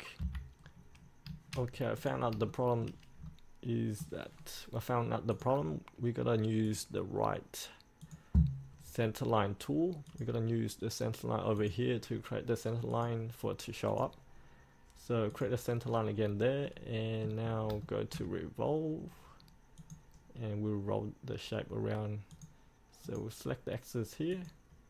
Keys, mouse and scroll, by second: 0.3 F8, 0.8-1.5 scroll down 1, 2.1 click, 2.7 shift+middle click, 3.4 middle click, 4.5-5.5 scroll down 1, 5.5 click, 6.8 right click, 8.2 click, 16.2-16.8 scroll up 1, 16.8 middle click, 17.6 scroll up 1, 18.0 shift+middle click, 20.0-21.1 drag.